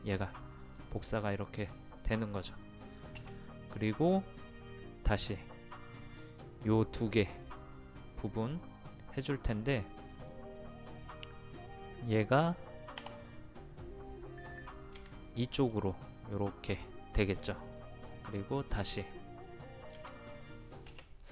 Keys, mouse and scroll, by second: 0.6 click, 1.2-2.7 middle drag, 3.7 space, 10.1 click, 13.0 m.